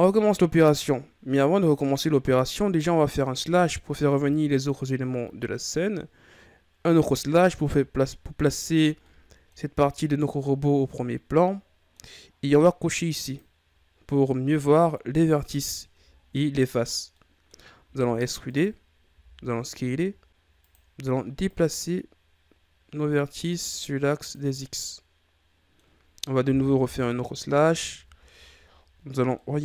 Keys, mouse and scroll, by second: 0.8-3.3 middle drag, 3.3 KP_Divide, 6.9 KP_Divide, 9.0 middle click, 9.6-10.5 scroll up 4, 10.5-11.0 scroll down 2, 11.0-13.1 middle drag, 13.1 click, 14.1-16.0 middle drag, 16.0-16.6 shift+scroll up 2, 16.6-17.1 scroll up 1, 17.1 middle click, 17.8 e, 19.0 s, 21.4-24.4 drag, 24.5-26.5 middle drag, 26.5 KP_Divide, 27.8 Tab, 28.5-29.3 ctrl+scroll up 5, 29.3-29.6 middle drag.